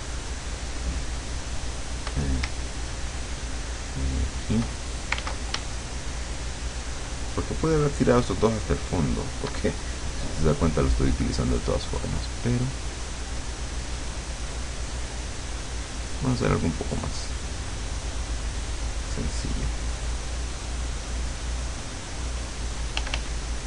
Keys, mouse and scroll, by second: 2.7-4.8 shift+drag, 5.2 ctrl+z, 5.8-9.4 shift+drag, 12.0 click, 13.2 click, 13.7 click, 14.7 click, 17.0 click, 23.0 f.